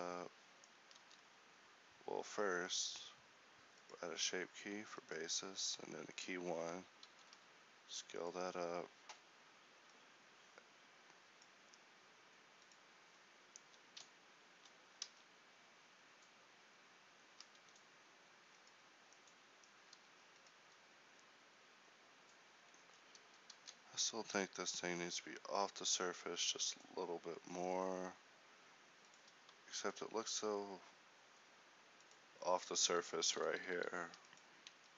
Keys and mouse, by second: 1.7 ctrl+z, 2.9 Tab, 7.1 Tab, 7.7 alt+s, 9.0 Tab, 15.7 alt+shift+a, 18.2 Escape, 20.7 a, 23.5 Tab, 23.9 a, 24.1 a, 24.8 alt+s, 30.9 s, 33.6 ,, 34.3 s.